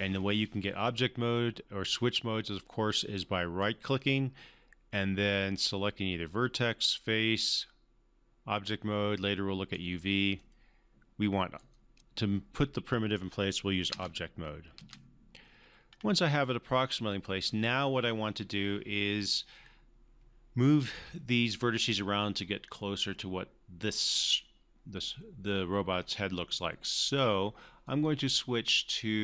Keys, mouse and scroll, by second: 3.6-9.9 right drag, 13.9 space, 15.8-16.4 scroll up 1, 27.8-29.2 right drag.